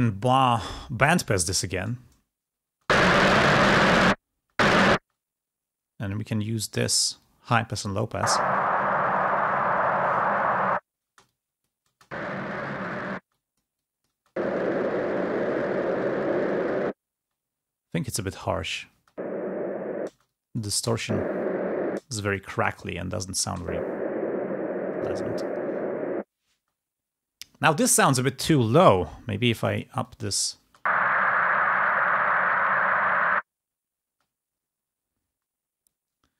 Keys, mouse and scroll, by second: 4.5 space, 6.3-7.9 drag, 7.9 space, 11.1-14.7 drag, 11.1 space, 18.5 click, 18.8 space, 22.4 click, 26.4 space, 30.7 space.